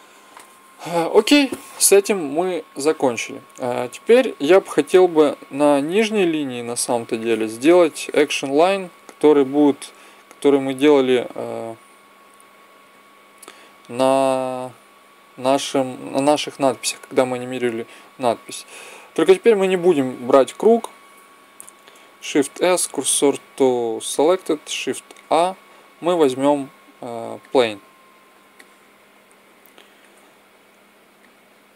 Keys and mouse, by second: 2.5-4.1 drag, 7.0-9.1 drag, 9.1 middle click, 9.6-11.3 drag, 21.4-23.2 right drag, 22.3 shift+s, 25.0 shift+a, 28.3-29.6 middle drag, 31.0-31.7 drag.